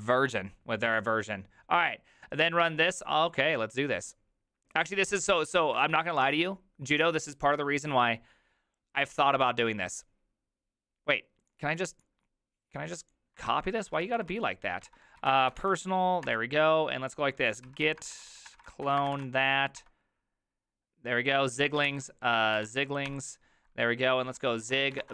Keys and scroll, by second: 5.8 alt+f, 13.5 alt+{, 14.0 ctrl+c, 14.2 ctrl+c, 14.3 ctrl+c, 14.9 ctrl+f, 15.0-16.1 typing, 16.2 Return, 17.4-19.4 typing, 19.8 Return, 21.9 ctrl+f, 22.0-25.1 typing.